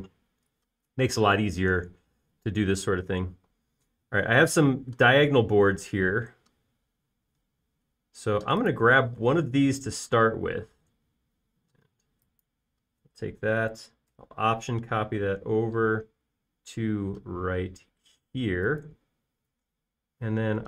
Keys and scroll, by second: 10.8 m.